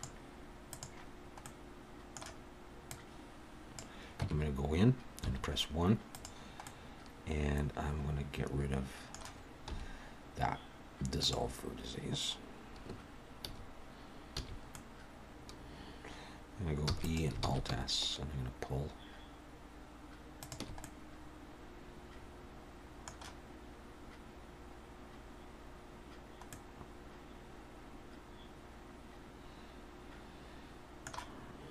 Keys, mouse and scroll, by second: 1.4 middle click, 2.9 click, 4.2 Tab, 5.2 1, 6.1 click, 6.6 middle click, 9.7 x, 14.4 a, 14.7 middle click, 15.1 click, 15.6 Tab, 16.9 e, 17.4 alt+s, 20.8 middle click, 24.0 scroll up 2, 24.8-25.4 scroll down 2, 26.5 middle click.